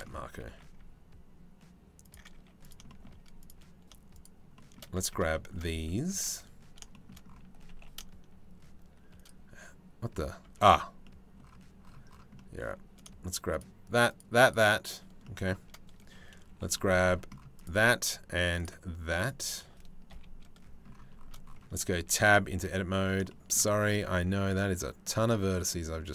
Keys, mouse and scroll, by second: 0.0 g, 2.0 z, 2.5 shift+middle click, 3.1 click, 5.1 shift+Tab, 6.0 a, 7.7 g, 10.3 Tab, 10.7 middle click, 12.6 middle click, 13.7 shift+click, 14.0 shift+click, 14.9 middle click, 16.1 c, 19.7 KP_3, 22.4 Tab, 22.6 a, 22.9-24.3 shift+middle drag, 24.3 g.